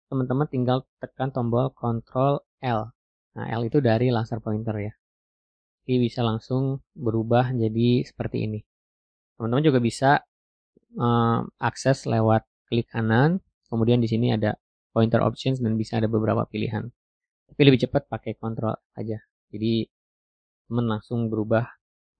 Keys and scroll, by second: 1.1 ctrl+l.